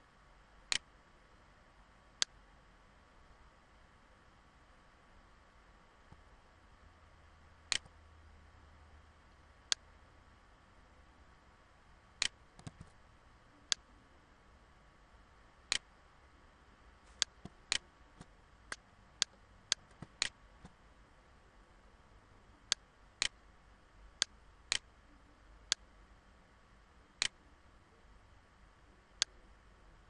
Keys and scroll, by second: 0.5 ctrl+z, 12.2 ctrl+z, 12.9 ctrl+z.